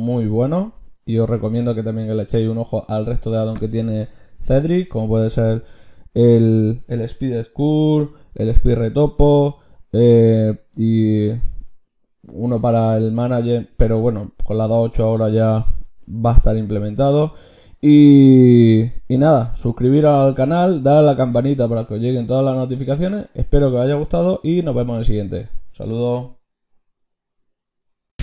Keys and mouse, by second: 6.4-9.0 drag, 7.5 t, 9.0 t, 11.6 click.